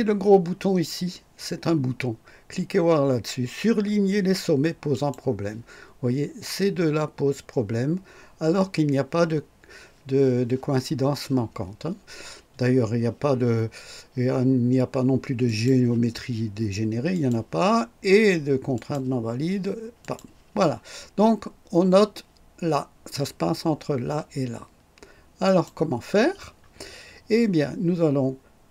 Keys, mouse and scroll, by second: 4.9 click, 15.4 click, 17.1 click, 18.7 click, 20.0 click, 25.4 click.